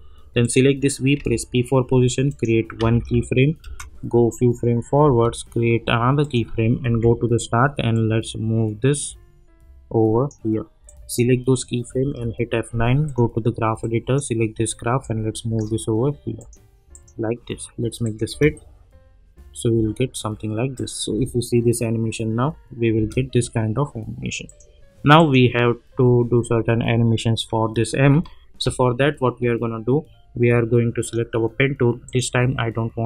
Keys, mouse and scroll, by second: 1.2 p, 2.2 click, 2.8 -, 3.0 -, 3.6 space, 6.2 click, 6.9 j, 7.9-10.4 drag, 12.0 F9, 13.0-14.4 drag, 18.2 space, 20.7 click, 21.1 space, 24.4 click, 31.0 click.